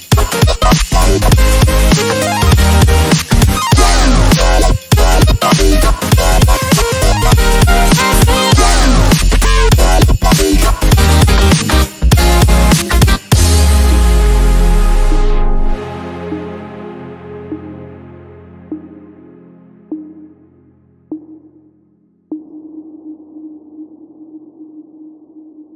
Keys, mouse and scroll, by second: 0.7 scroll down 1, 1.5 click, 1.9 scroll down 1, 2.6-3.6 ctrl+alt+click, 3.6 scroll down 1, 4.4 click, 5.4 right click, 6.2 click, 6.4-6.7 scroll down 1, 8.7 scroll up 1, 8.9 scroll down 1, 9.0-9.5 scroll up 1, 9.5 scroll down 1, 9.8 scroll up 1, 10.0-10.5 scroll down 1, 10.5-11.1 drag, 12.2 scroll up 1, 12.9 click, 13.0 space, 13.8-14.6 drag, 16.2 scroll up 1, 16.8-17.6 click, 17.7 scroll down 1, 18.4-19.0 click, 19.2 space, 19.3 click, 19.4 space, 20.1-20.9 click, 21.1 scroll up 1, 21.3 scroll down 1, 21.7-22.5 drag, 23.1 space, 23.7 click.